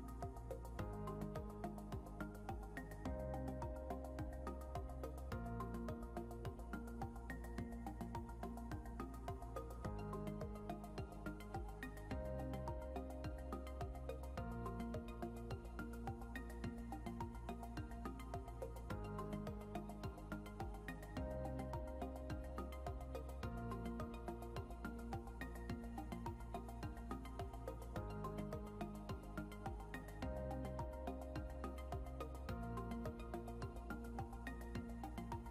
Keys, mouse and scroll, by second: 0.0-0.5 typing, 1.7 r, 2.5 =, 2.9 a, 7.0-11.3 typing, 12.5-13.2 typing, 15.1-16.9 typing, 23.0 click, 28.3 click.